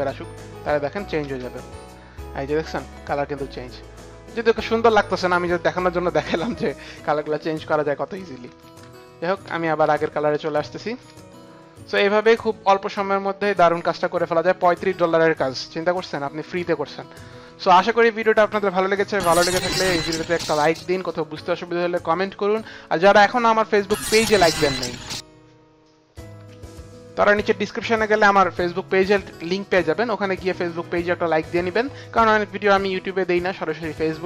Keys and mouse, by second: 0.6 click, 1.2 space, 5.4 click, 8.4 ctrl+z, 8.4 click, 8.8 ctrl+z, 8.8 click, 9.4 ctrl+z, 9.8 ctrl+z, 10.5 ctrl+z, 12.3 ctrl+shift+z, 12.3 click, 14.9 click, 16.0 click, 24.3 click.